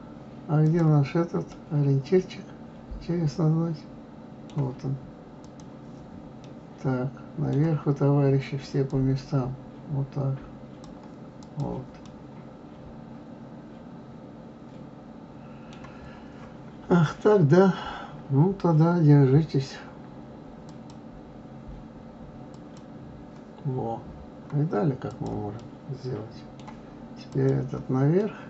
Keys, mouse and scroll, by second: 0.6 click, 1.5-4.5 middle drag, 5.4 click, 6.4-8.8 middle drag, 8.8-11.6 drag, 12.0-15.0 middle drag, 20.6-23.6 drag, 25.1 click, 25.5-27.3 middle drag, 27.3 click, 28.2-28.4 middle drag.